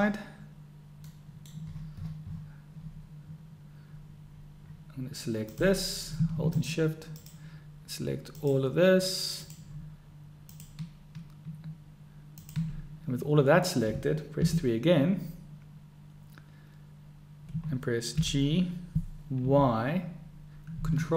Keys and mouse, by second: 1.4 click, 5.5 click, 7.3 shift+click, 8.5 shift+click, 9.5 shift+click, 10.5 shift+click, 14.4 KP_3, 18.3 g.